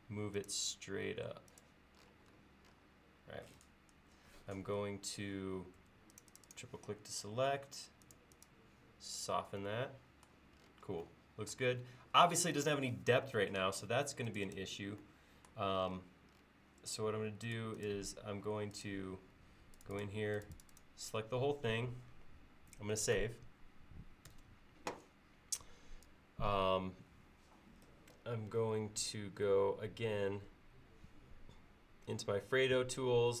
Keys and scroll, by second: 5.9 space, 24.4 ctrl+s.